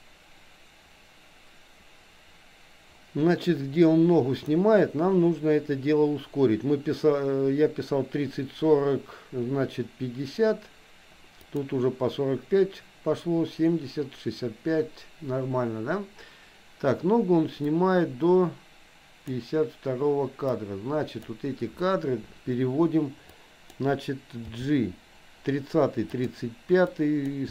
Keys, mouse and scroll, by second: 11.5 click, 17.7-19.4 drag, 20.6 click, 23.5 click, 24.4 g, 27.0 click.